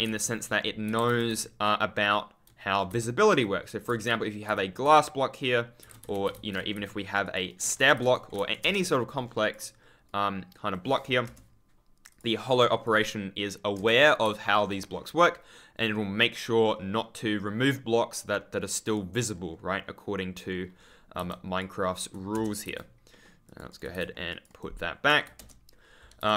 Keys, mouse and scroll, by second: 0.9 Escape, 1.2 w, 3.2 right click, 3.8 scroll down 1, 4.0 a, 5.8 Escape, 6.2-8.1 typing, 7.2 click, 7.4 right click, 7.8 ctrl+scroll down 2, 8.1 scroll up 1, 8.3 ctrl+s, 8.5 Right, 9.1 ctrl+click, 9.1-9.5 ctrl+scroll down 1, 11.2 Return, 12.0 click, 13.7 Return, 14.4 ctrl+click, 14.5-15.5 ctrl+scroll up 1, 16.2 ctrl+click, 16.6-17.5 ctrl+scroll up 1, 19.3-20.4 ctrl+scroll down 1, 20.4-20.7 ctrl+scroll up 1, 20.7-21.1 ctrl+scroll down 1, 21.1 ctrl+z, 22.6-26.1 typing, 23.0 middle click, 23.4 click, 23.6 right click, 24.2 click, 24.4 right click.